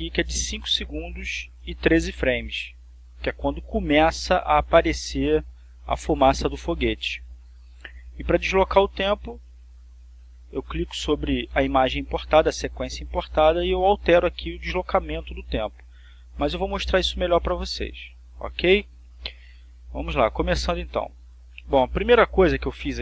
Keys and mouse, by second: 5.9-8.7 drag, 9.5 click, 10.5 click, 16.8 click, 17.5 click, 18.6 click, 21.2-22.3 drag, 22.4-23.0 drag.